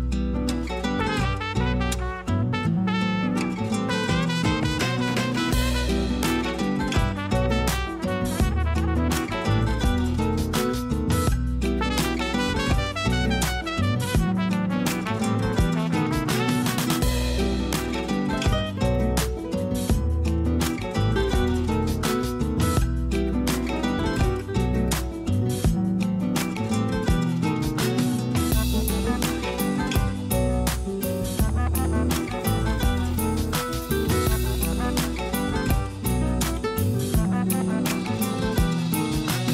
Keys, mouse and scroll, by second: 3.4 click, 4.7-8.8 drag, 10.0-11.0 drag, 11.0 Tab, 11.3-12.7 scroll down 4, 12.7-14.1 shift+middle drag, 14.1 click, 23.1 a, 23.3 a, 23.5-24.1 scroll down 3, 24.1-25.1 shift+middle drag, 25.1 scroll up 1, 25.8 click, 27.4-29.2 drag.